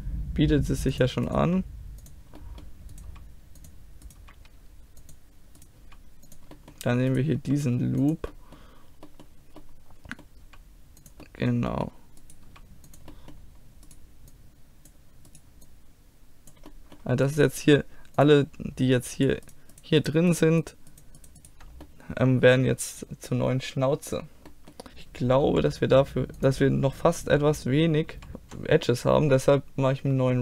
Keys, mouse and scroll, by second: 1.3 click, 1.5 g, 2.0 click, 2.4-3.7 drag, 3.1 g, 4.2 g, 5.9 g, 7.4 g, 8.3 click, 8.8-10.5 middle drag, 10.5 g, 12.3 right click, 12.5 g, 12.9 click, 14.4 middle click, 14.9-16.8 drag, 14.9-16.8 right drag, 16.8 middle click, 17.1 right click, 17.8 click, 20.8-21.9 drag, 21.9-23.3 middle drag, 24.9 middle click, 25.5 click, 25.5 r, 28.2 g, 28.3 ctrl+r.